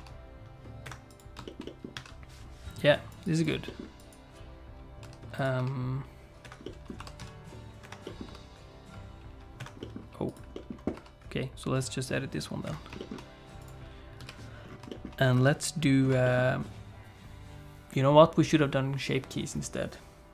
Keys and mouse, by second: 0.0 r, 1.1 click, 1.4 shift+middle click, 1.6 middle click, 1.9 a, 3.1 click, 3.3 click, 3.6 middle click, 5.0 s, 5.6 r, 6.6 middle click, 7.0 r, 8.0 middle click, 8.2 r, 9.8 middle click, 10.5 middle click, 10.9 r, 13.0 middle click, 13.7 click, 14.2 KP_3, 14.9 middle click, 15.3 KP_1, 16.2 shift+middle click.